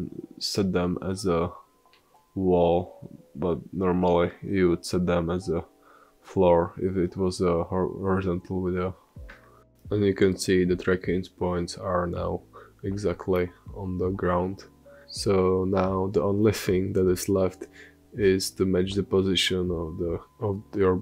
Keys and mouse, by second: 0.5-2.6 middle drag, 3.0-6.8 middle drag, 3.6 space, 4.9 space, 6.8 g, 14.9 r, 16.7 ctrl+z.